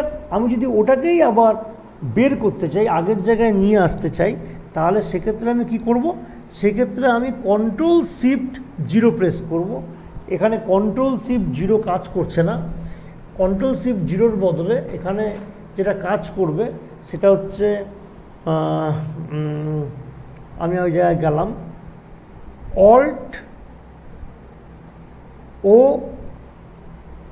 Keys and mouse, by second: 3.6 typing, 7.7 click, 7.7 typing, 8.9 ctrl+shift+0, 18.3 click, 21.3 click, 25.4 o.